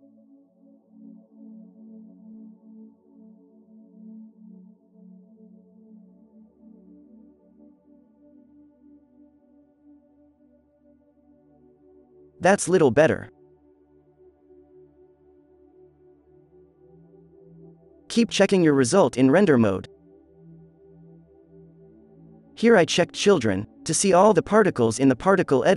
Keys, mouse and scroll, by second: 0.4 f, 0.7 f, 0.9-1.4 drag, 1.7 f, 2.6 ctrl+z, 2.8 f, 3.5-5.7 drag, 4.7 ctrl+z, 6.4-10.2 drag, 8.9 z, 9.6 alt+a, 12.4 alt+a, 12.4 alt+a, 16.3-17.6 drag, 16.9 alt+a, 17.0 z, 20.1 n, 21.0 n, 23.3 n, 23.8 f, 24.4 f, 25.5 f.